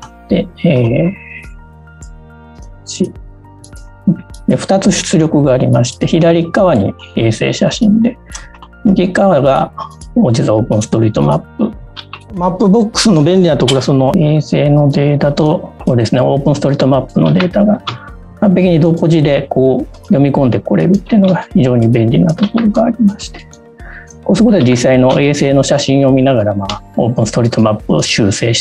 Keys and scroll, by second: 11.7 space, 11.9 w, 15.3 space, 18.6 space, 22.9 w, 25.7 space, 27.9 w.